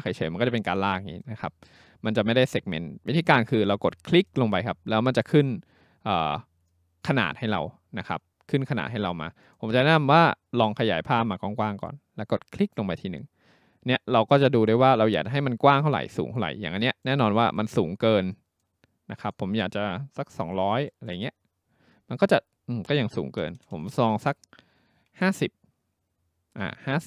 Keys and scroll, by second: 20.4-21.7 typing, 23.6 BackSpace, 23.7 BackSpace.